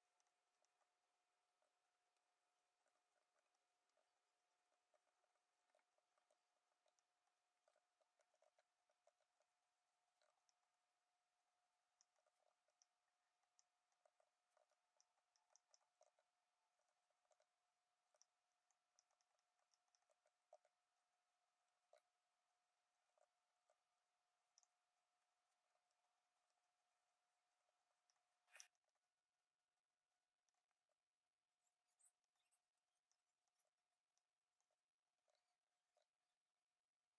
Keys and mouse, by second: 0.1 middle click, 0.4 click, 0.9 click, 1.6 ctrl+a, 2.0 click, 2.7 click, 3.0 click, 3.9 ctrl+a, 4.5 click, 4.7 Tab, 4.9-9.0 typing, 6.4 click, 6.9 middle click, 8.3 Tab, 8.8 Tab, 9.3 Tab, 9.8 click, 10.0 click, 10.4 middle click, 11.3 click, 11.9 middle click, 12.1 Tab, 12.2 a, 12.4 shift+n, 12.6 Tab, 12.7 middle click, 13.5 middle click, 14.1 ctrl+z, 14.1 ctrl+z, 14.5 shift+n, 14.6 Tab, 15.1 click, 15.3 middle click, 15.9 g, 16.7 Tab, 16.8 1, 17.2 g, 18.1 Tab, 18.1 middle click, 18.6 click, 18.9 shift+click, 19.1 click, 19.7 click, 19.9 click, 20.0 f, 20.2 y, 20.3 Escape, 20.4 g, 21.0 click, 21.9 g, 23.1 shift+d, 23.6 s, 24.5 middle click, 24.9-25.9 drag, 26.0 click, 26.7 click, 28.0 middle click, 28.6 ctrl+z, 28.7 click, 29.3 click, 30.0 click, 30.8 s, 32.2 click, 32.5 click, 33.1 middle click, 33.6 s, 34.1 click, 34.7 s, 35.9 g.